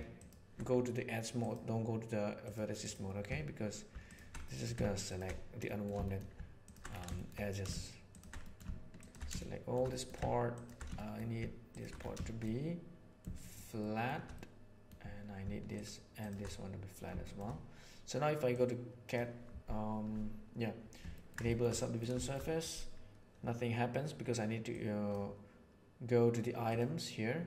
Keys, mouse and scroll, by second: 0.1 click, 1.3 click, 2.4 click, 2.8 click, 4.4 middle click, 5.6 middle click, 6.0 shift+middle click, 7.0 shift+middle click, 8.4 middle click, 9.3 shift+middle click, 9.8 middle click, 10.9 shift+middle click, 12.3-13.4 middle drag, 13.7 shift+middle click, 14.3 middle click, 16.2 alt+shift+right click, 18.6 middle click, 21.0 ctrl+middle click, 21.4 shift+middle click, 21.8 middle click, 22.1 shift+middle click, 24.6 right click.